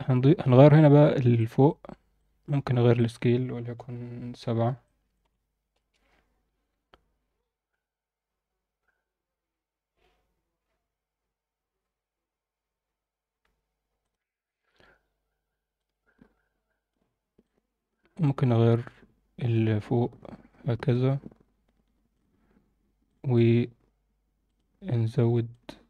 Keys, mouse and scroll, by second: 1.3 click, 2.1 click, 2.9-5.7 drag, 15.8-16.9 drag, 17.4-22.1 drag, 23.0 drag.